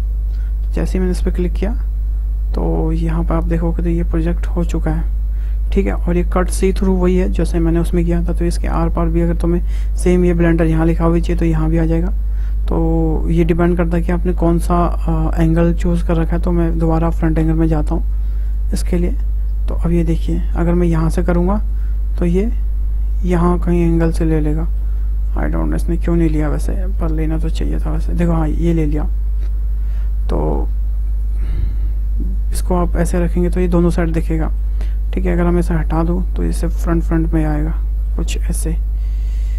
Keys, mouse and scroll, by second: 3.0-6.0 middle drag, 7.2-12.0 middle drag, 16.2 `, 18.5 click, 19.1-21.8 middle drag, 21.8 click, 22.3 click, 23.4-25.7 middle drag, 25.7 click, 26.7-28.9 middle drag, 28.9 scroll up 1, 29.0-30.7 middle drag, 30.7 `, 32.3 click, 32.9-34.8 middle drag, 34.8 `, 36.1 click, 36.6-38.2 middle drag, 38.2 `, 39.3 click.